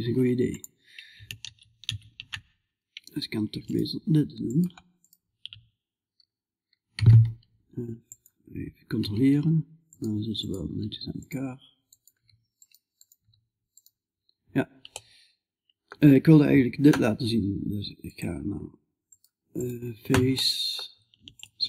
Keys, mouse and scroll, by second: 3.1-9.3 right drag, 8.4 g, 10.1-14.4 right drag, 10.1 g, 11.6 g, 12.7 g, 14.4-16.2 middle drag, 17.5-21.6 drag, 18.5-21.6 right drag.